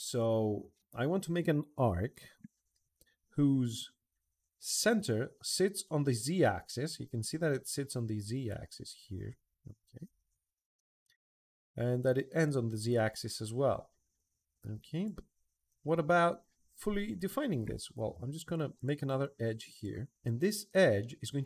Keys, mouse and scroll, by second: 0.4 Escape, 0.8 Escape, 12.2-14.8 drag, 18.5 click, 19.5 click, 19.7 Escape.